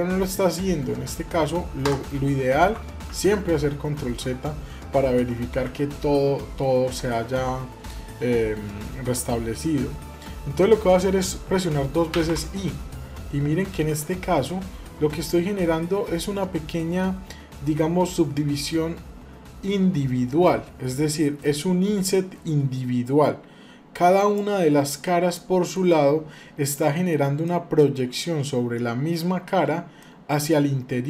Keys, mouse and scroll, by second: 2.8 ctrl+z, 5.3 a, 24.8 middle click, 25.8-26.5 scroll up 2, 26.5 middle click, 27.2 shift+middle click, 29.8-31.0 middle drag.